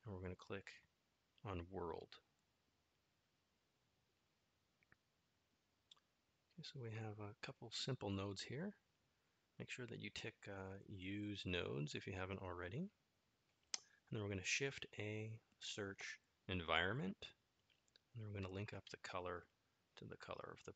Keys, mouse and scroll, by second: 1.1-4.0 drag, 6.0 middle click, 12.6 shift+a, 19.7-20.7 drag.